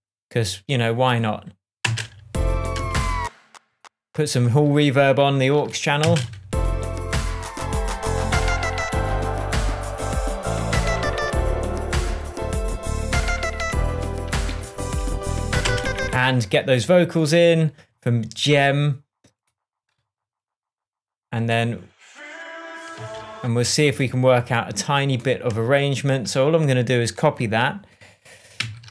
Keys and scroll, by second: 2.2 space, 6.4 space, 14.9 super+t, 16.1 space, 23.3 space.